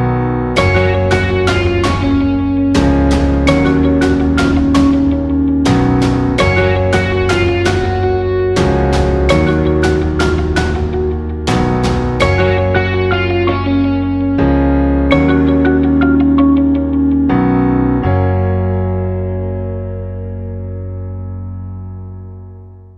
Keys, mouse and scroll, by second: 0.0 click, 0.6 right click, 2.8-15.6 drag, 15.6-17.7 drag, 19.5-22.9 alt+shift+drag.